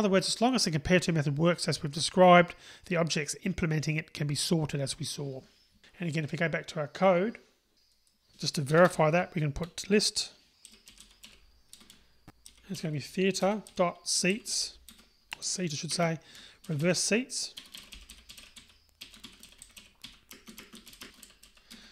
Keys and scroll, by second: 11.8 Return, 18.9 Return, 21.8 Return.